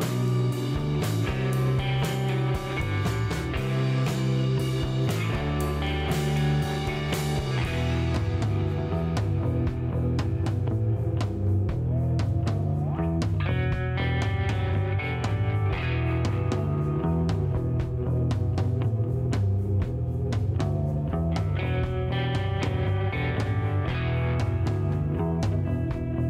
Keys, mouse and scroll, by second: 0.0 click, 0.0 g, 1.1-3.9 typing, 1.7 click, 2.3 click, 3.1 right click, 4.1 click, 7.2 a, 8.1 c, 9.9 s, 11.0 click, 11.0 g, 12.7 click, 12.7 s, 14.1 a, 14.6 c, 15.2 right click, 15.2 g, 16.1 click, 16.3 s, 16.9 click, 18.3-24.3 typing, 20.3 click, 20.9 click, 21.8 click, 21.8 right click, 22.8 right click, 23.7 click.